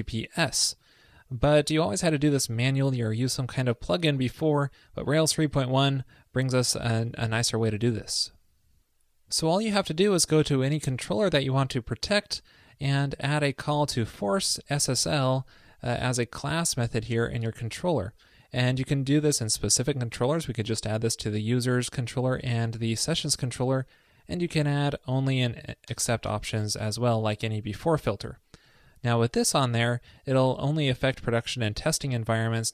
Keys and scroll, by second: 25.9 alt+BackSpace, 28.8 super+s.